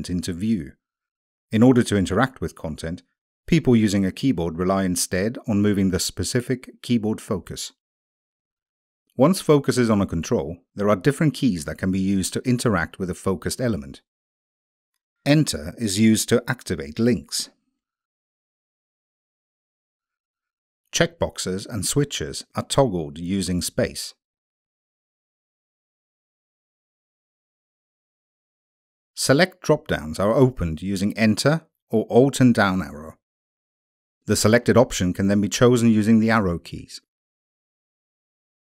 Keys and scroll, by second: 10.1 Tab, 11.1 Tab, 12.0 Tab, 13.0 Tab, 13.9 Tab, 15.3 Return, 20.0 Tab, 21.8 space, 23.3 Tab, 25.0 space, 31.9 alt+Down, 33.8 Down, 34.9 Down, 36.1 Down.